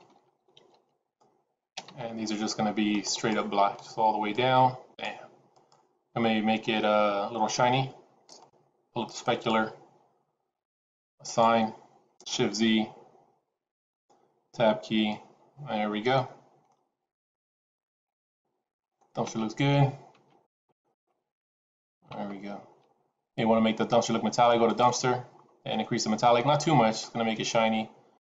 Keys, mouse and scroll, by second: 3.0 click, 8.3 click, 11.1 click, 13.2 shift+z, 13.8-14.2 scroll down 2, 14.5 Tab, 15.0 middle click, 16.8-17.6 scroll down 5, 17.9 middle click, 20.3 middle click, 24.6 click, 26.2 click.